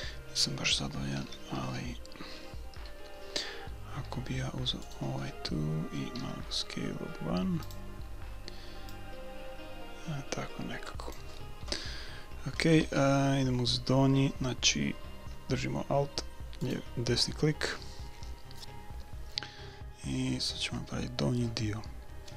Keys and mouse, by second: 1.2 a, 4.9-6.8 right drag, 6.2 s, 8.9-10.6 drag, 12.0-14.0 middle drag, 12.8 a, 16.6-18.4 right drag, 20.8-22.3 middle drag.